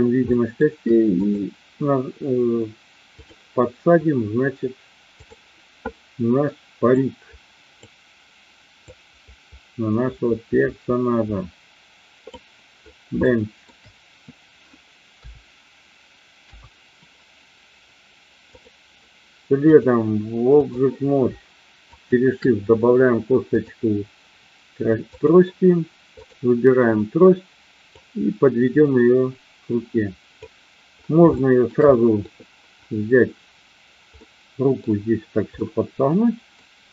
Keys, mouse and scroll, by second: 0.3 shift+middle drag, 1.1-2.1 drag, 3.1 click, 5.3 click, 8.8-12.2 drag, 13.1-13.6 shift+middle drag, 15.1 KP_3, 16.3 KP_1, 19.6-20.7 drag, 22.0 shift+click, 23.6-25.2 drag, 26.1-27.1 drag, 28.0-30.3 drag, 31.3 shift+middle drag, 32.0 middle click, 34.1-34.7 middle drag, 35.6-36.6 middle drag.